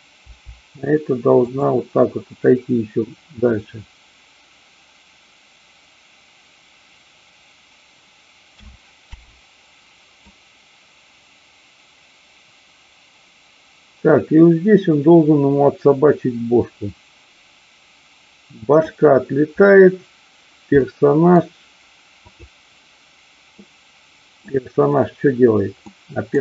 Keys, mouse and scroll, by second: 0.2 g, 1.4 click, 8.4 a, 9.0 i, 10.3-18.8 drag, 20.8-21.3 middle drag, 22.2-23.2 drag, 23.6-24.4 middle drag, 25.8 middle click.